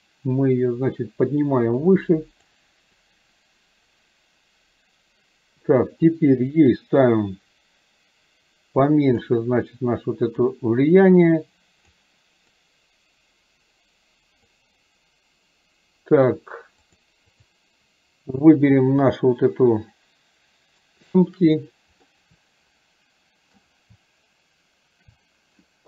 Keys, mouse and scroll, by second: 0.0 click, 0.3-2.6 drag, 6.9-9.4 drag, 10.4-12.1 drag, 12.5-14.6 drag, 17.1 click, 21.0 shift+right click, 22.1-23.6 middle drag.